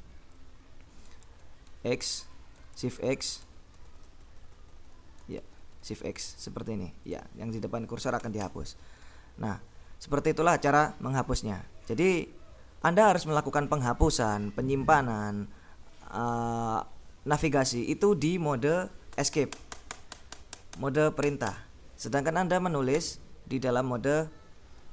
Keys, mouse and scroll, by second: 0.0-1.7 typing, 3.1 x, 4.0 l, 5.5 shift+x, 5.7 shift+x, 8.3 Escape, 19.4 Escape, 23.0 i.